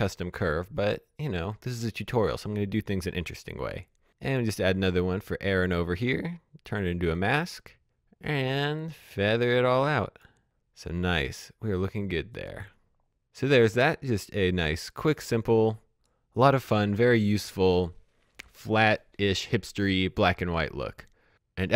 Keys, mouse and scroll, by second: 0.0 click, 6.8 click, 8.5 click, 11.2 click, 12.0 scroll down 1, 12.2-12.9 scroll up 1.